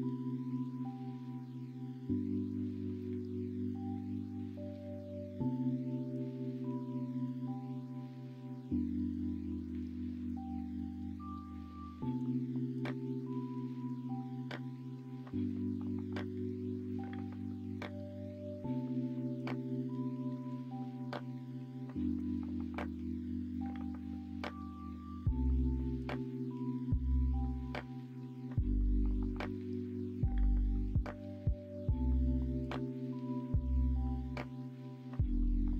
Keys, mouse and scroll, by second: 0.1 middle click, 2.7 middle click, 5.0 middle click, 6.7 middle click, 9.4 2, 12.1 f, 12.4 middle click, 13.5 ctrl+r, 17.0 ctrl+f, 19.2 middle click, 19.6 middle click, 20.0 middle click, 22.1 ctrl+f, 23.4 middle click, 24.0 2, 26.5 middle click, 27.4 s, 30.7 middle click, 31.2 middle click, 31.4-34.8 drag, 34.8 middle click, 35.5 middle click.